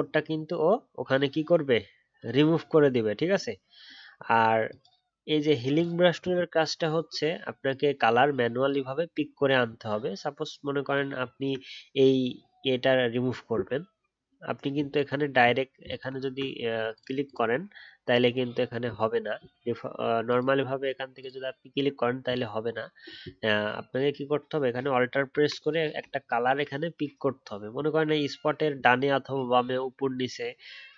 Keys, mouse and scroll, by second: 11.0-12.3 alt+scroll up 2, 26.1 alt+scroll down 1, 27.3-28.3 alt+scroll up 1.